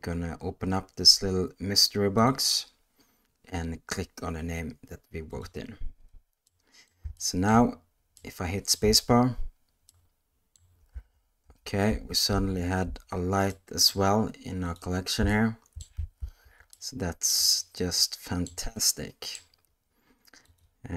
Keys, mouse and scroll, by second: 2.3-5.4 drag, 6.5-6.9 middle drag, 7.2-7.5 shift+middle drag, 8.2 middle click, 8.8 space, 9.9 middle click, 10.9-12.8 typing, 13.5-13.9 middle drag, 14.6 click, 15.3-15.8 shift+middle drag, 16.2 ctrl+z, 16.7-17.3 middle drag, 17.6-18.5 shift+middle drag, 18.7-19.3 middle drag, 20.4 click.